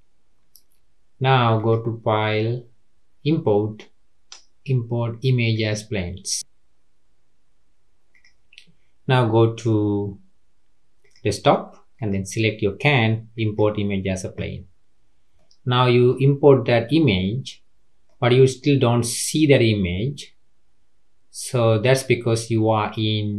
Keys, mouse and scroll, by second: 1.5-4.7 drag, 8.1 click, 15.0-15.3 scroll up 1, 15.3-16.3 middle drag, 16.3-16.8 scroll up 3, 16.8-21.6 middle drag.